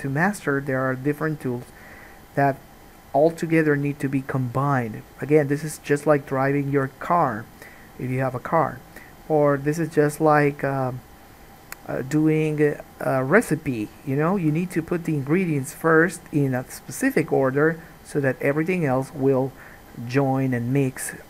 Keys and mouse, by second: 6.9 g, 7.8-14.2 middle drag, 14.2 click, 14.3-15.8 middle drag, 14.5 g, 15.8 click, 15.9-18.8 middle drag, 17.4 g, 18.8 click, 18.9-21.2 middle drag, 19.2 g.